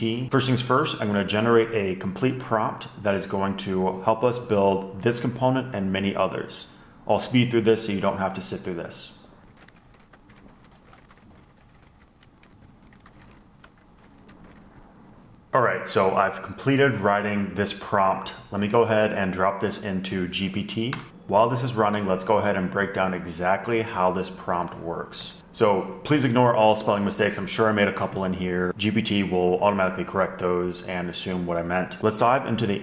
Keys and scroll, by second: 1.7 super+n, 9.5-14.9 typing, 13.5 super+Left, 13.6 Return, 19.0 super+a, 19.1 super+c, 20.6 super+v, 21.1 Return.